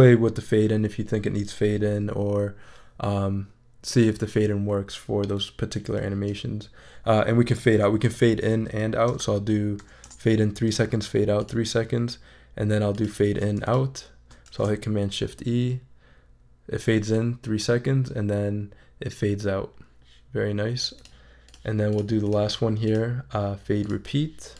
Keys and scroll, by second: 8.5 3, 9.1 0, 10.0 Return, 14.5 shift+super+e.